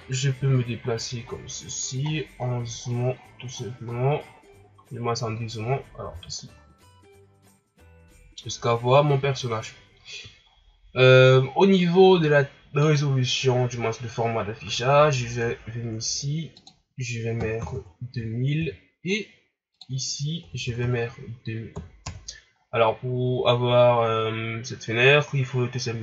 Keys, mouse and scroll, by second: 6.0 n, 6.5-9.9 scroll down 15, 18.6 KP_0.